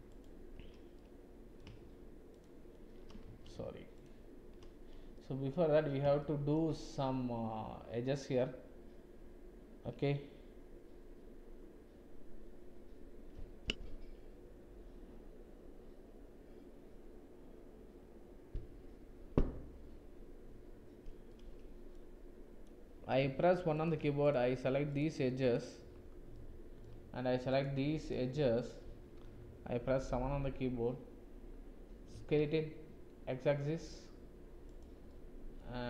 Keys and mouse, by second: 0.9 click, 2.3 alt+shift+click, 3.2 ctrl+z, 5.1 click, 6.2 shift+click, 21.3 click, 23.7 click, 25.4 shift+click, 26.3-26.9 drag, 27.5 shift+click, 29.8 KP_7, 32.1 s, 35.0 click, 35.5 middle click.